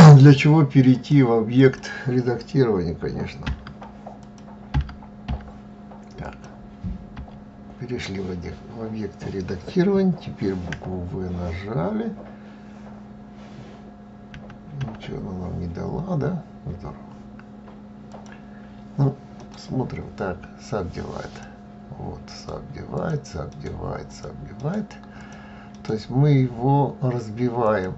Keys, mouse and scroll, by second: 0.7 click, 3.2 Tab, 3.9 click, 4.4 Tab, 5.1 Tab, 6.0 click, 6.9 Tab, 10.4 w, 14.1 w, 14.6 w, 17.8 click, 19.1-27.4 right drag, 27.4 click.